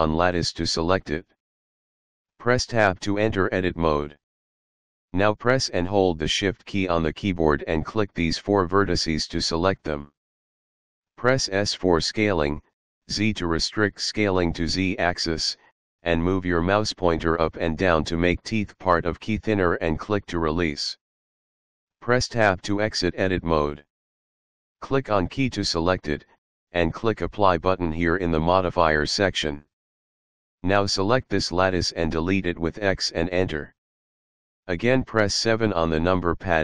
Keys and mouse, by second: 1.8 click, 3.6 Tab, 4.8 click, 6.5 shift+click, 8.0 shift+click, 9.5 shift+click, 11.4 s, 12.2 z, 20.5 click, 22.4 Tab, 24.5 click, 28.4 click, 30.3 click, 33.0 x, 34.2 click, 35.7 KP_7.